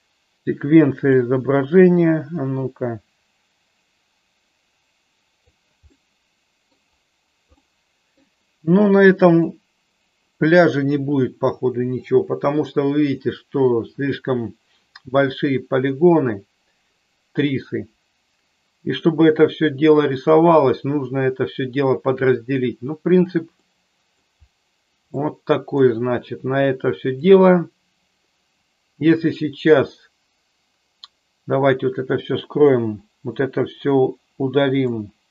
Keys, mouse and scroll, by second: 2.3-5.5 drag, 6.1-6.7 middle drag, 7.6 middle click, 9.7 click, 23.7 middle click, 25.2 middle click.